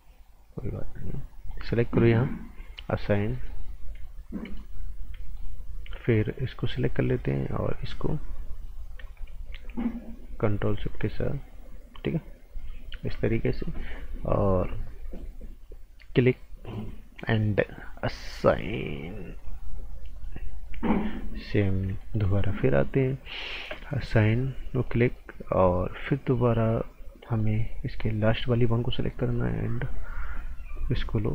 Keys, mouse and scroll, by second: 0.7 click, 3.1 scroll down 1, 3.3 right click, 3.7 scroll down 1, 4.4 right click, 4.9 scroll up 1, 5.2 right click, 6.6 click, 10.4 ctrl+shift+click, 16.6 click, 19.4 click, 20.6 right click, 22.0 alt+right click, 24.8 click, 27.3 click, 27.4 right click, 28.2 click.